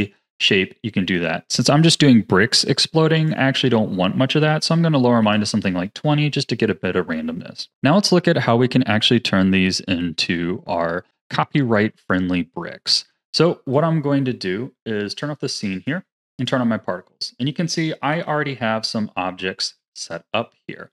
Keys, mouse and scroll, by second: 3.1-6.3 drag, 7.7 click, 9.1-12.0 drag, 15.1 click, 15.7 click, 16.3 click, 17.1-18.1 middle drag, 18.1 KP_7, 18.8-19.4 scroll up 8, 19.4-20.9 middle drag.